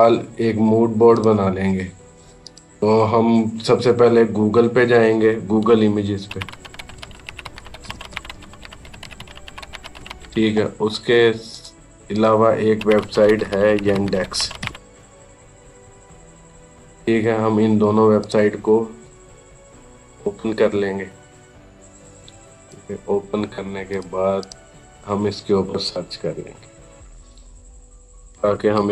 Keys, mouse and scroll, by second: 5.2 typing, 6.5-9.5 typing, 9.7 Return, 11.3 click, 12.6-14.5 typing, 18.0 click, 21.8-22.1 scroll up 1, 22.4 click, 26.8 click, 28.1-28.6 typing.